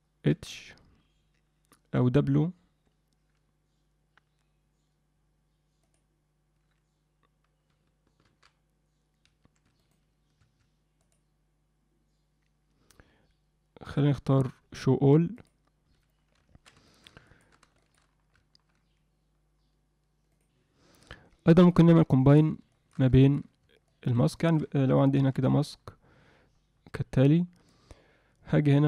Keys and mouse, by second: 0.3 h, 2.0 w, 9.5 Escape, 11.0-15.5 drag, 16.9 alt+shift+middle click, 17.3 ctrl+alt+middle click, 17.7 alt+shift+middle click, 21.6 click, 21.9 middle click, 22.7 shift+middle click, 23.2 ctrl+alt+middle click, 23.9 middle click, 24.3 ctrl+middle click, 25.1 m, 25.3-27.7 drag.